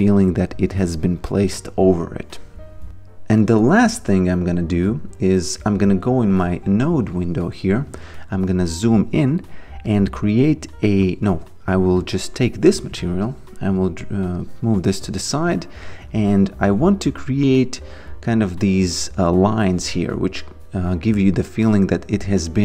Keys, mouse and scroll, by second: 4.1 click, 8.3 alt+right click, 9.9 click, 11.3 ctrl+z, 12.0 click, 15.7 alt+right click.